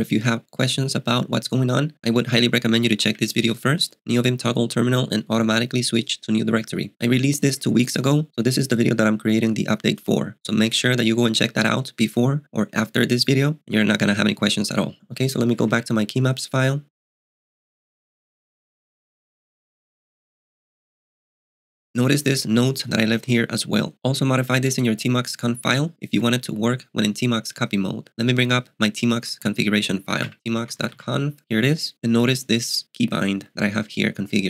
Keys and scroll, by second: 3.0 Return, 15.6 space, 15.7 BackSpace, 23.1 k, 23.3 k, 30.1-31.5 typing, 31.9 Return.